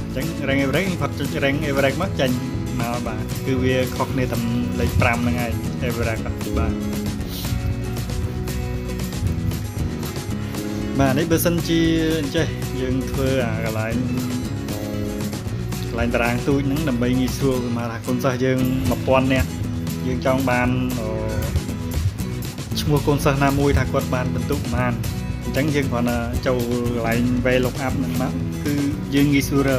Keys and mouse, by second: 1.9 click, 3.5-4.2 drag, 6.0 ctrl+click, 9.7 click, 10.4 click, 12.5 ctrl+click, 17.4 ctrl+click, 20.7 ctrl+click, 21.9 ctrl+click, 25.0 click, 26.3 click, 27.8 click, 29.7 click.